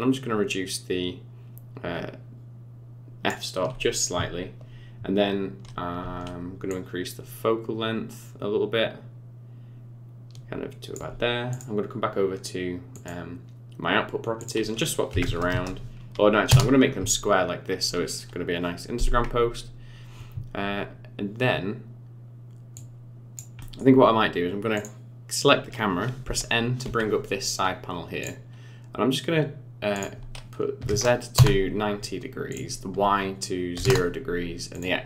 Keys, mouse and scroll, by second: 6.7 shift+click, 11.5 click, 13.0 click, 14.4 click, 15.5 KP_0, 22.8 click, 23.6 middle click, 24.0-24.8 scroll down 6, 24.8 click, 25.7 scroll up 4, 26.3 n, 26.9 n, 28.2 click, 29.9 click, 32.5 click, 34.7 click.